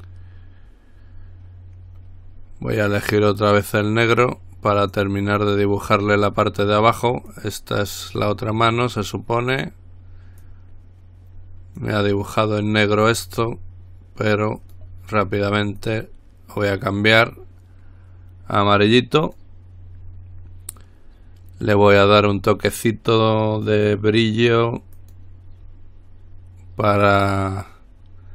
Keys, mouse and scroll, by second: 5.0 click, 7.5-8.9 drag, 10.6-12.5 drag, 14.8 click, 16.0 click, 19.4 click, 25.1 click.